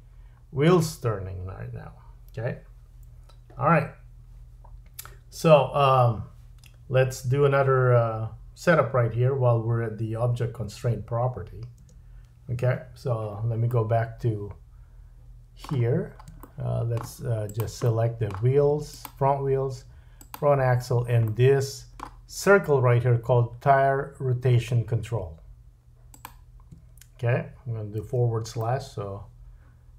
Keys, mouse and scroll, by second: 11.8 space, 13.7 middle click, 15.8-16.2 scroll up 2, 16.4 shift+middle click, 17.5 click, 17.8 middle click, 18.9 shift+click, 20.2 shift+click, 21.3 middle click, 26.1 shift+click, 28.0 /, 28.6 middle click.